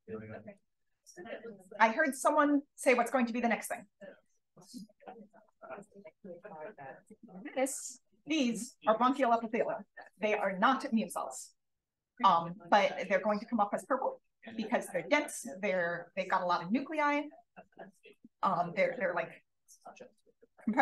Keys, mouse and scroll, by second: 0.1 click, 3.5 click, 4.3-5.2 drag, 5.8 d, 7.0 d, 10.4 click, 10.9 d, 11.5 d, 12.6 click, 13.2 d, 13.7 d.